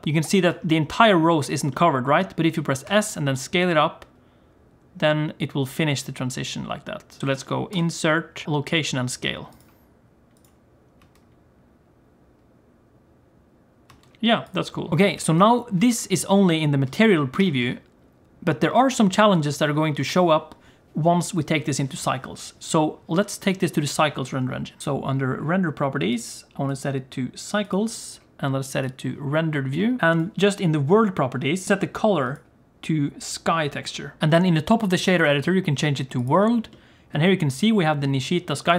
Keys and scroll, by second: 2.8 s, 7.7 i, 9.6 typing, 10.9-12.3 typing, 13.9 space, 15.2 g, 16.1 z, 17.3 g, 30.0 alt+a.